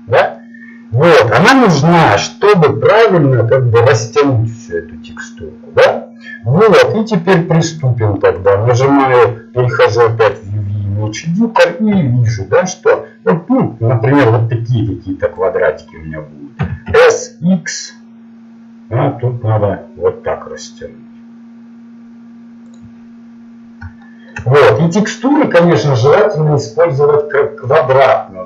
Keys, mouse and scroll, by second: 12.0 s, 16.6 s.